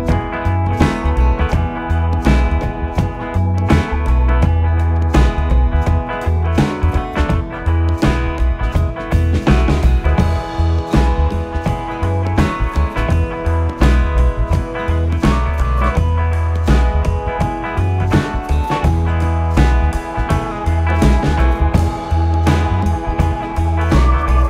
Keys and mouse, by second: 0.7 e, 3.3 click, 5.1 e, 6.7 right click, 7.5 ctrl+z, 9.9 s, 12.6 click.